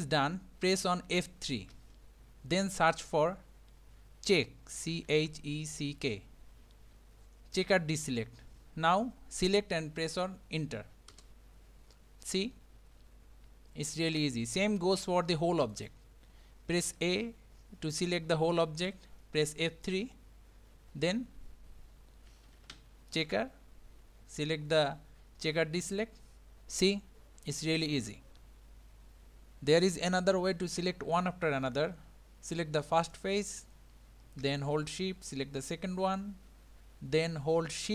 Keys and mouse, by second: 1.8 F3, 12.5-14.8 middle drag, 15.7 click, 16.9 a, 19.6 F3, 26.8-28.3 middle drag, 33.0 click, 35.6 shift+click.